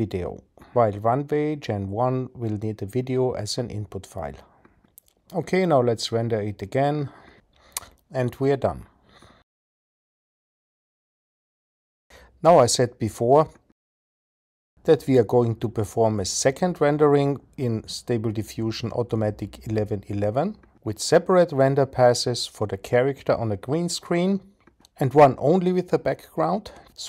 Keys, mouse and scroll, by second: 2.9-7.0 drag.